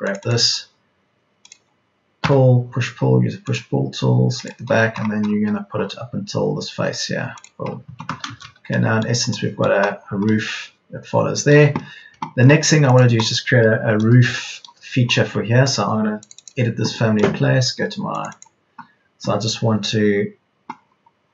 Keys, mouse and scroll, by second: 3.1 p, 7.7 Escape, 11.4 Escape, 15.3 Escape, 17.4 Escape.